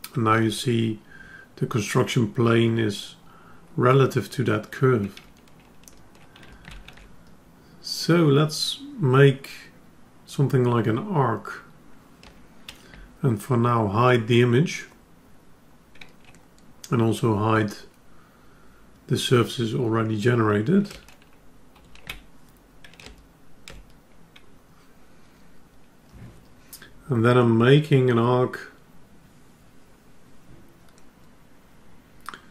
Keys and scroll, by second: 22.0 ctrl+h.